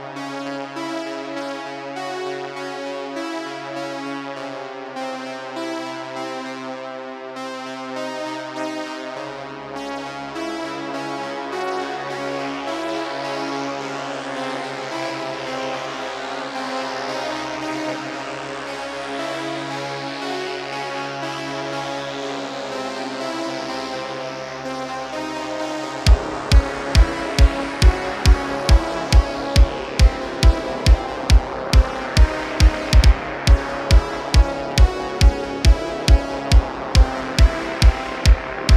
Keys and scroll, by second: 5.0 Tab, 10.3 shift+a, 11.5 s, 11.7 z, 23.5 shift+a, 27.7 `.